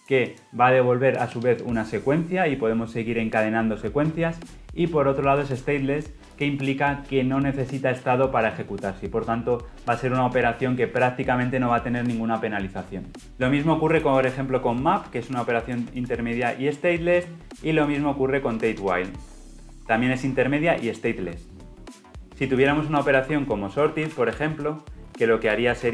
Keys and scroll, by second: 13.9 ctrl+b, 16.2 ctrl+alt+Left, 17.8 ctrl+b, 19.7 ctrl+alt+Right, 21.6 ctrl+alt+Left, 25.8 Return.